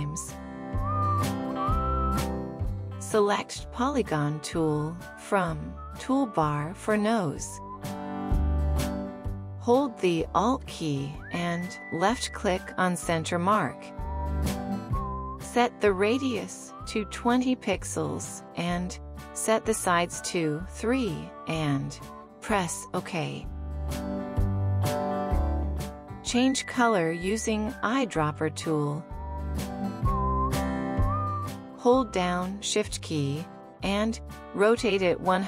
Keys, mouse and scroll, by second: 4.5 right click, 13.5 alt+click.